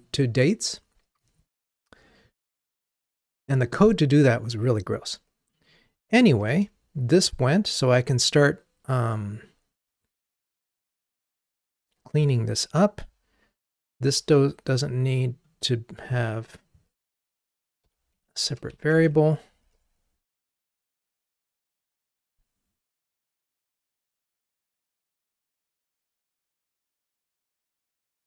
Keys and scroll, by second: 18.2 Escape, 18.9 super+BackSpace, 19.7 ctrl+r.